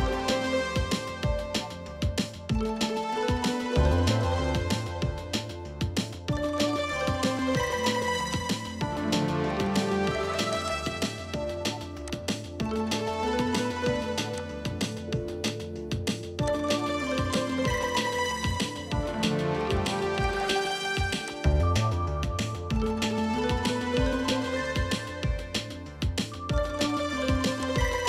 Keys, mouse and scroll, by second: 9.3 scroll down 1, 10.8 double click, 11.8 typing, 20.4-21.0 typing, 22.1 scroll down 1, 22.6 middle click, 23.3 scroll down 1, 24.5-24.8 scroll up 1, 25.9 middle click, 26.3-28.0 scroll up 1.